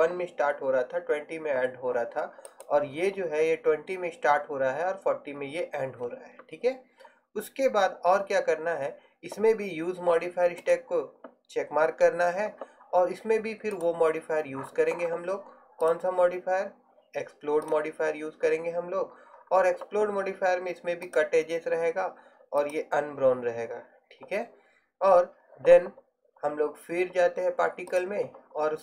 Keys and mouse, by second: 2.1 middle click, 2.6-10.8 right drag, 15.9-17.8 drag, 21.3-28.8 drag.